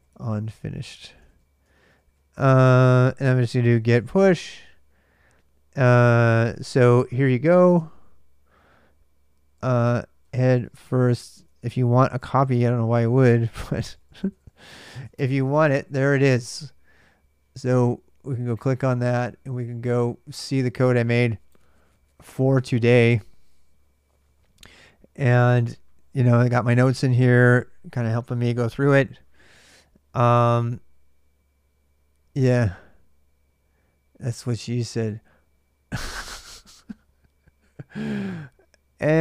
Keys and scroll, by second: 0.0-2.0 typing, 3.3-4.6 typing, 6.5-7.9 typing, 9.1-15.3 typing.